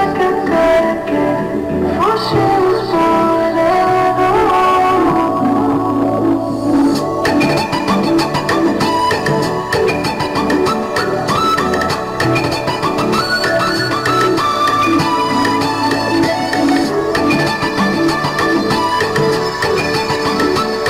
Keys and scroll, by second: 8.2 ctrl+j.